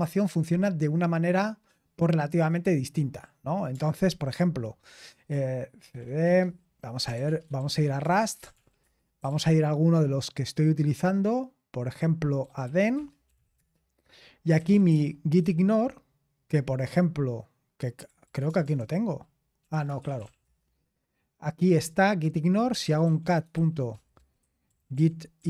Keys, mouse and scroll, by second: 2.4 click, 3.9 ctrl+c, 5.6-9.6 typing, 12.1-15.4 typing, 17.8-20.7 typing, 22.4-25.4 typing.